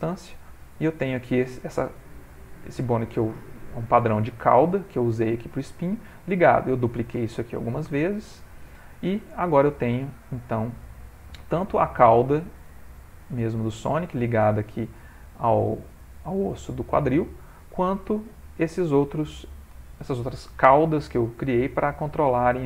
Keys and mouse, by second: 0.4 middle click, 1.5 click, 2.7 click, 3.5 click, 5.0 middle click, 5.6 middle click, 6.4 middle click, 7.2 middle click, 7.9 shift+middle click, 8.1 shift+middle click, 8.3 middle click, 10.5 ctrl+middle click, 11.0 ctrl+middle click, 11.6 ctrl+middle click, 12.2 shift+middle click, 12.8 ctrl+middle click, 13.3 middle click, 14.4 middle click, 14.6 shift+middle click, 15.5 click, 16.9 middle click, 17.4 ctrl+middle click, 17.8 middle click, 19.2 click, 19.8 shift+middle click, 20.1 middle click.